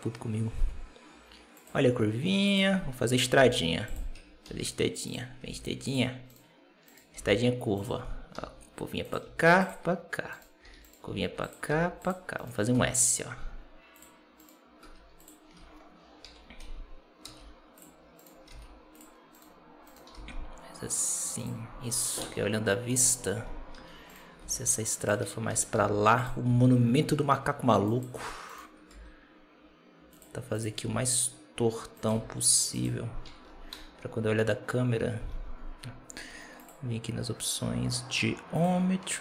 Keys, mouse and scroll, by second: 3.3 g, 4.1 Tab, 4.3 s, 5.3 g, 6.2 right click, 7.0 g, 8.2 r, 9.1 s, 10.2 right click, 10.5 s, 10.7 right click, 10.9 s, 11.6 r, 12.2 right click, 12.6 r, 14.3 right click, 14.7 r, 15.3 scroll down 2, 15.5 Tab, 16.1 Tab, 17.1 g, 18.1 right click, 18.4 g, 19.2 right click, 20.0 g, 21.6 scroll up 1, 21.8 Tab, 22.1 KP_0, 22.8 KP_0, 23.6 Tab, 24.0 right click, 24.3 g, 25.6 r, 26.3 s, 28.3 right click, 28.8 r, 30.4 right click, 30.7 r, 32.0 s, 33.2 Tab, 33.6 KP_0, 35.1 KP_0, 36.4 click, 38.4 click, 38.8-39.2 scroll down 10.